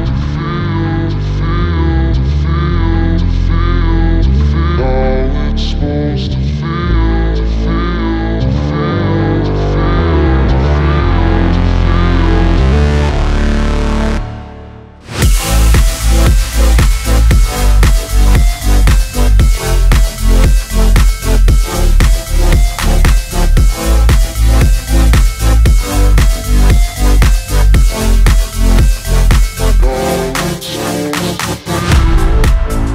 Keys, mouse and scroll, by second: 2.3 space, 4.2-8.5 drag, 8.9 space, 11.4-12.9 drag, 13.3 shift+s, 13.9 click, 15.7-19.1 drag, 19.1-24.1 drag, 25.3 Return, 26.0-30.8 drag.